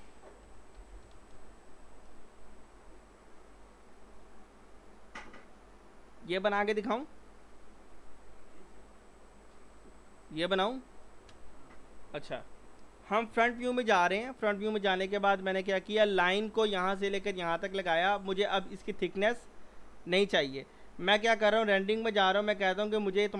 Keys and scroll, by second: 0.6-1.3 typing, 2.5 typing, 13.3-13.7 typing.